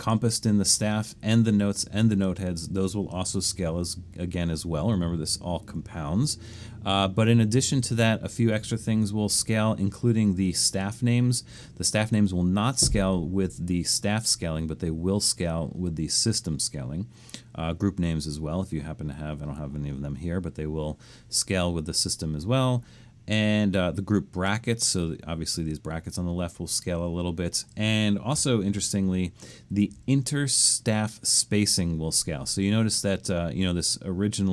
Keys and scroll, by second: 4.9 super+=, 5.7 super+=, 8.6 super+=, 28.6 super+-, 29.1 super+-, 29.7 super+-.